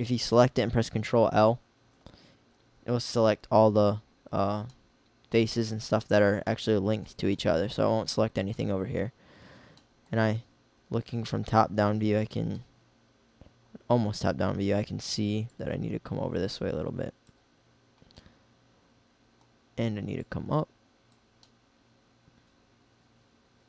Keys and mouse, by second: 1.6 ctrl+l, 10.1 middle click, 11.2 KP_7, 21.9 middle click.